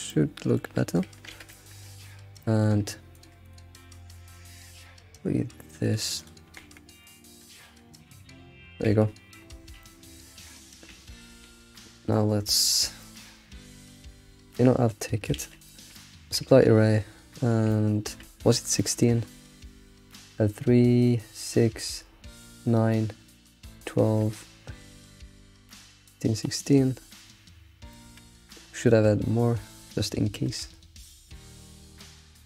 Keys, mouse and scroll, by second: 0.1-1.3 shift+middle drag, 1.3 alt+shift+z, 1.5 shift+middle click, 1.7-2.1 scroll up 6, 2.4 shift+middle click, 3.1 click, 3.4 ctrl+click, 4.0 g, 6.2 click, 6.5 g, 7.5 click, 7.8 g, 8.8 ctrl+s, 9.1-9.8 scroll down 14, 9.8-10.4 shift+middle drag, 10.4 Tab, 10.6 scroll down 4, 10.9 ctrl+s, 11.1-11.5 scroll up 5, 11.5 alt+shift+z, 12.7-13.0 scroll up 3, 13.0-13.5 shift+middle drag, 13.5-15.0 scroll up 3, 15.0-15.4 scroll down 4, 15.4 alt+shift+z, 15.7 shift+middle click, 16.4 ctrl+a, 17.3-17.7 scroll down 6, 17.7-19.3 shift+middle drag, 19.3 scroll up 3, 24.3-27.3 shift+middle drag, 27.9-28.3 shift+middle drag, 28.3-28.7 scroll up 3, 28.7-32.4 shift+middle drag.